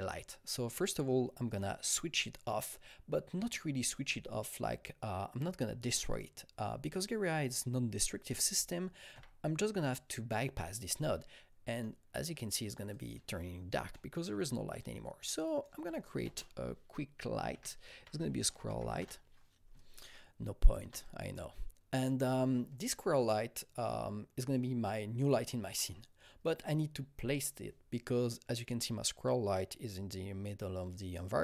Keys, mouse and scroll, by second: 1.5 click, 6.1 click, 6.1 scroll down 1, 6.1 click, 9.1 click, 9.1 scroll up 1, 9.1 u, 11.7 click, 11.7 u, 12.9 click, 13.9 alt+middle click, 13.9-14.2 alt+scroll, 14.5 scroll, 14.7 click, 15.4 double click, 15.7 alt+middle click, 15.7 alt+scroll, 15.8 click, 16.2 ctrl+space, 17.5-17.9 typing, 18.7 Up, 19.0 Return, 20.1-31.4 shift+drag.